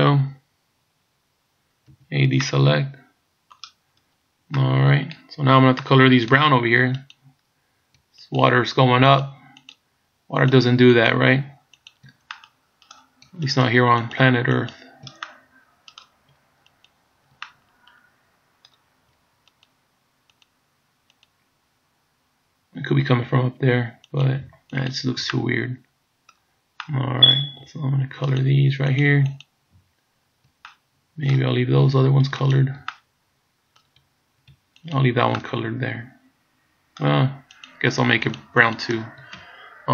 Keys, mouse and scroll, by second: 2.0 a, 2.5 middle click, 4.0 scroll up 2, 4.6 middle click, 5.3 scroll up 2, 5.9 middle click, 7.2 right click, 8.3 shift+right click, 9.2 right click, 9.3 shift+right click, 9.8 shift+right click, 10.5 shift+right click, 11.0 shift+right click, 11.9 shift+right click, 12.3 middle click, 13.5 shift+right click, 14.2 shift+right click, 14.7 shift+right click, 15.3 middle click, 16.9 shift+right click, 17.5 middle click, 19.5 shift+right click, 20.5 shift+right click, 21.3 shift+right click, 24.2 shift+right click, 24.9 shift+right click, 25.4 middle click, 26.8 middle click, 28.4 shift+right click, 29.0 shift+right click, 29.5 shift+right click, 30.7 middle click, 31.6-32.4 scroll up 4, 32.5 shift+right click, 33.0 middle click, 35.0 shift+right click, 35.4 middle click, 37.8 shift+right click, 38.4 shift+right click, 38.8 shift+right click, 39.5-39.9 scroll down 3.